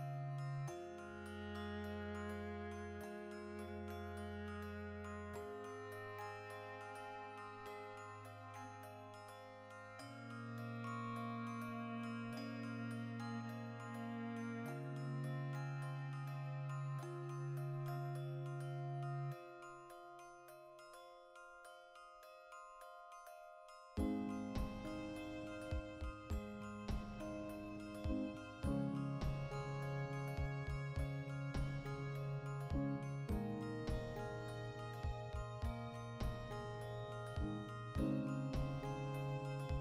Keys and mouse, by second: 0.9-2.8 drag, 2.8-4.0 ctrl+middle drag, 3.2 Tab, 3.7 3, 4.0 alt+right click, 4.4 ctrl+KP_Add, 5.4 ctrl+middle click, 6.2 alt+shift+right click, 6.3 ctrl+middle click, 7.2 alt+shift+right click, 7.8 ctrl+z, 7.9 middle click, 8.3 alt+shift+right click, 8.7 middle click, 9.5 alt+shift+right click, 9.9-11.9 middle drag, 11.9-14.4 drag, 14.1 Tab, 14.4-18.4 ctrl+middle drag, 18.4 right click, 18.8 alt+q, 19.3-20.7 ctrl+shift+middle drag, 19.7 Tab, 20.7-21.8 right drag, 21.8 g, 23.0 click, 24.3-28.6 middle drag, 25.2 alt+q, 26.2 Tab, 26.7 a, 28.6 right click, 29.1-31.9 drag, 31.9-36.8 ctrl+middle drag, 32.2 a, 36.8 right click, 36.9 shift+middle click, 37.8-39.0 drag, 39.0 Tab, 39.3 right click, 39.5 l.